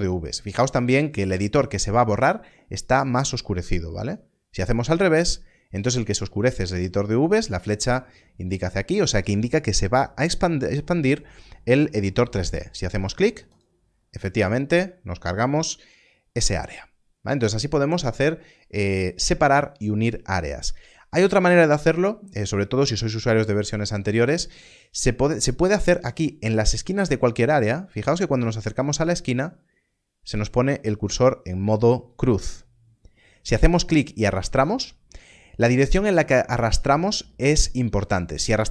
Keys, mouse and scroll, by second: 13.5 click.